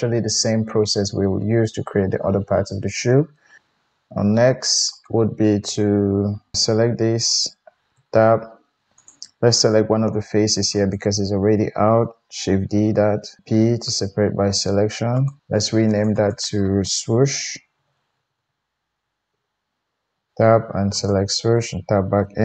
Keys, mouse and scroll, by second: 3.6 KP_1, 4.9 click, 7.4 click, 7.9 Tab, 8.2-8.9 middle drag, 8.9 click, 9.0-10.7 middle drag, 10.5 3, 10.7 click, 10.9-14.3 middle drag, 12.6 shift+d, 13.4 p, 14.5-15.9 middle drag, 15.9 click, 16.0 middle click, 16.1-21.0 drag, 18.3 o, 20.1 Tab, 21.0 middle click, 21.5 Tab.